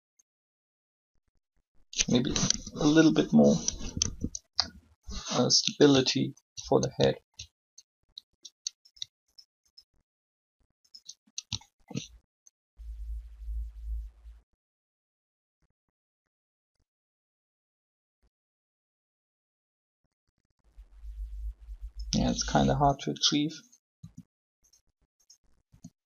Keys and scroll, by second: 2.5 3, 4.0 3, 4.5 5, 24.0 r, 25.7 r.